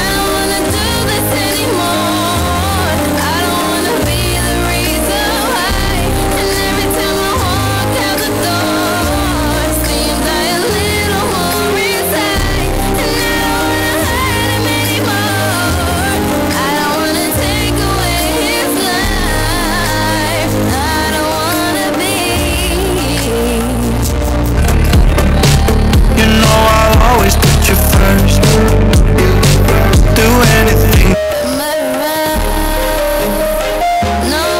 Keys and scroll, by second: 31.0 Page_Down.